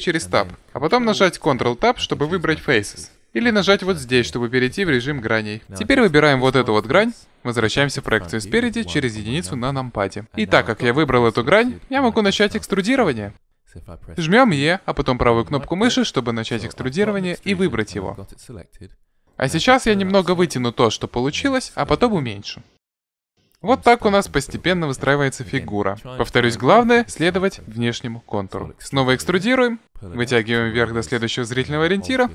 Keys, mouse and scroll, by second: 1.7 ctrl+Tab, 4.3-5.6 drag, 5.6-7.4 right drag, 9.7 KP_1, 14.7 e, 19.3-21.1 drag, 21.7 s, 29.6 e.